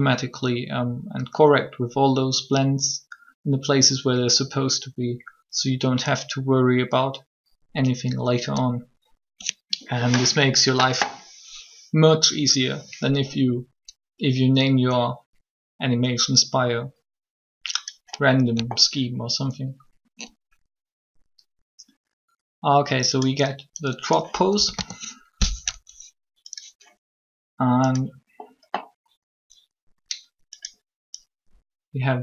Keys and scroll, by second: 24.5 a, 24.6 a.